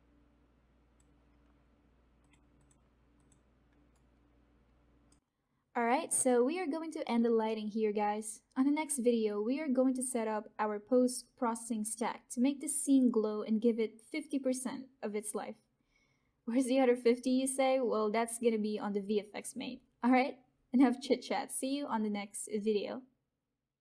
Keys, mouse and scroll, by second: 3.9-14.9 alt+right drag, 13.1 alt+right click.